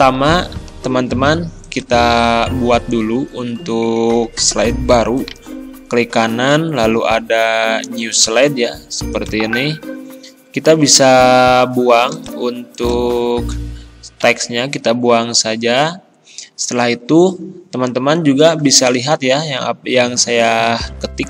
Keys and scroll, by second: 14.3 Delete.